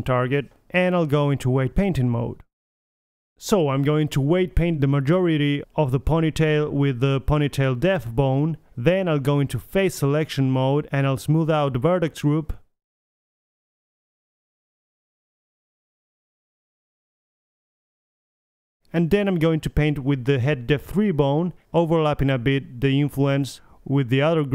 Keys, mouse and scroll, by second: 0.2 middle click, 0.7 middle click, 1.0 click, 3.0 click, 4.7-7.6 middle drag, 11.5 Tab, 12.5-13.7 drag, 13.7 middle click, 13.7 click, 14.5 a, 14.7 a, 16.5 click, 16.8-18.2 middle drag, 18.4 click, 18.9 click, 20.1 click, 20.5 middle click, 20.6 click.